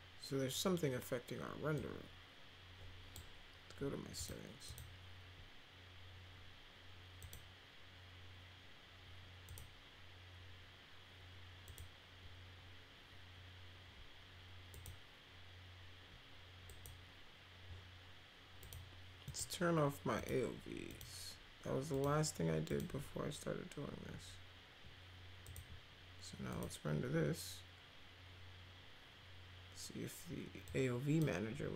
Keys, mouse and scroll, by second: 1.7-3.1 drag, 4.1 click, 4.6 click, 7.2 click, 9.4 click, 11.6 click, 14.7 click, 16.6 click, 18.6 click, 19.2 click, 20.2 click, 20.9 click, 21.9 click, 22.6 click, 25.4 click, 26.5 click, 30.6-31.1 drag.